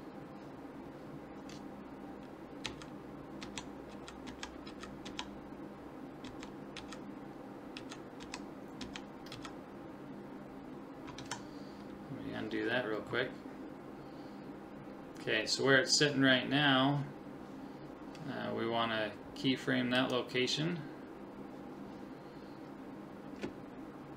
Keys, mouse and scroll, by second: 2.7 Right, 3.4 Left, 3.9 Right, 4.3 Left, 4.7 Right, 5.1 Left, 6.3 Left, 6.8 Right, 7.8 Right, 8.2 Left, 8.8 Left, 9.3 Right, 11.3 ctrl+z, 20.0 click, 21.9 click.